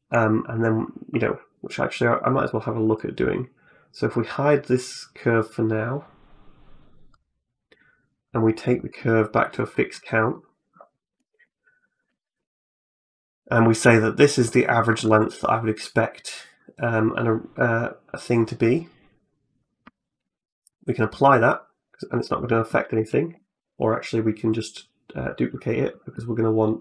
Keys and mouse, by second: 0.0 middle click, 2.7 click, 3.9 click, 6.9 click, 8.1 click, 9.5 middle click, 10.1 middle click, 10.8 middle click, 11.1 shift+middle click, 11.6 middle click, 11.9 shift+middle click, 12.4 middle click, 13.1 click, 14.8 ctrl+a, 19.0 click, 20.0 ctrl+a, 20.9 middle click, 21.4 middle click, 23.2 ctrl+z, 24.3 click.